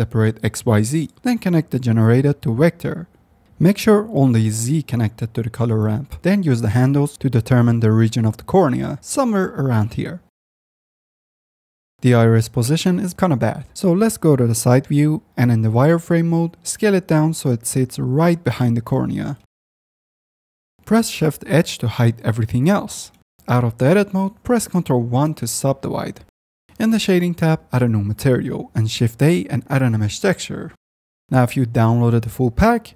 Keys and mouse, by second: 1.6-2.2 drag, 2.7 click, 2.9 middle click, 3.9 middle click, 7.6-8.0 drag, 8.2-8.6 drag, 8.8 click, 9.3 F10, 9.8 click, 11.8 ctrl+z, 11.8 alt+h, 12.6 h, 13.0 ctrl+z, 13.3 x, 14.1 click, 14.7 z, 15.1 s, 15.5-16.3 drag, 16.9 s, 20.7 drag, 20.9-21.6 middle drag, 22.9 shift+h, 23.3 middle click, 23.3 z, 24.5 ctrl+1, 26.5 ctrl+2, 27.4 shift+a, 28.2 click, 28.3 KP_Decimal, 31.2 F9, 32.0 click.